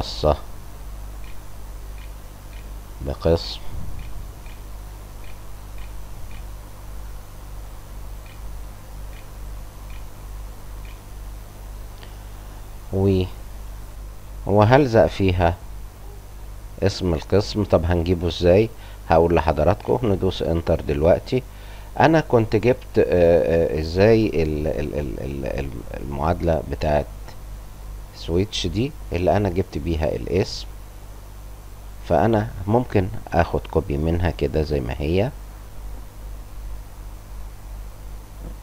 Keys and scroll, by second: 1.2-5.2 typing, 6.5 shift+Up, 6.5-9.2 typing, 10.8-12.5 typing, 11.5 Return, 13.9 BackSpace, 19.7 Return.